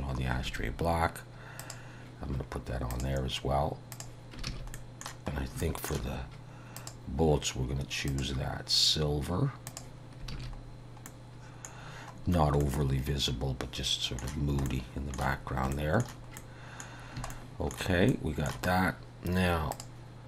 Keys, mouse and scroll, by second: 0.5 alt+a, 1.6 click, 3.0 click, 4.5 alt+a, 4.8 middle click, 5.4 scroll up 3, 5.7 shift+middle click, 6.8 click, 8.1 click, 10.4 alt+a, 11.1 middle click, 11.8-13.7 scroll down 4, 12.6 middle click, 14.7 shift+middle click, 15.9 shift+middle click, 16.4 middle click, 17.0 scroll down 2, 17.3 shift+middle click, 18.2 shift+middle click, 18.8-19.2 scroll up 3, 19.8 click.